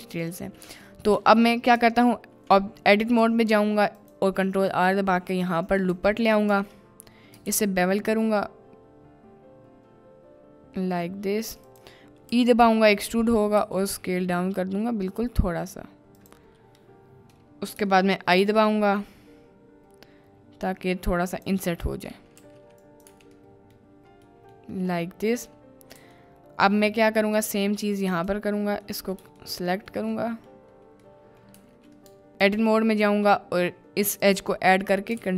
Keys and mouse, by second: 0.3 middle click, 0.8 Tab, 1.0 middle click, 2.6 middle click, 3.5 ctrl+r, 7.2 click, 7.5 ctrl+b, 11.6 click, 12.4 e, 13.6 s, 16.2 click, 18.5 i, 21.3 click, 23.1 Tab, 23.1 `, 23.5 middle click, 24.2 middle click, 25.0-25.5 middle drag, 26.3-26.7 shift+middle drag, 29.0 middle click, 29.5-29.9 shift+middle drag, 29.9 shift+click, 30.3 middle click, 30.3 click, 31.2 middle click, 31.7 Tab, 32.3 ctrl+r, 34.3-34.7 drag.